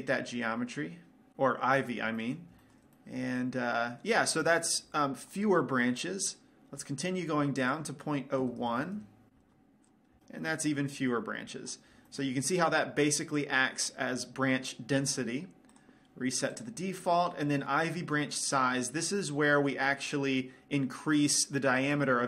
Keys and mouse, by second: 0.7 click, 2.8 middle click, 3.9 middle click, 4.8-6.9 middle drag, 6.9-9.7 drag, 10.1-11.8 drag, 12.8 middle click, 14.0-15.9 drag, 16.3-18.1 right drag, 20.2-21.7 middle drag.